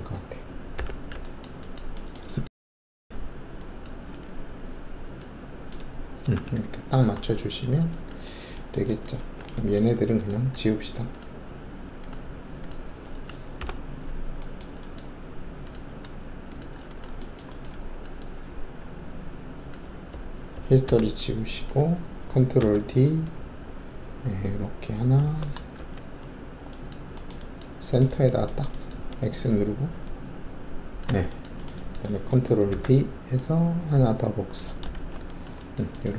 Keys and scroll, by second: 0.7 4, 4.7-5.7 typing, 7.4 alt+shift+q, 7.4 typing, 13.6 shift+Delete, 20.8 alt+d, 22.5 ctrl+d, 25.7 alt+shift+2, 29.9 alt+x, 30.4-31.0 typing, 32.6 ctrl+alt+d, 34.9 alt+shift+q.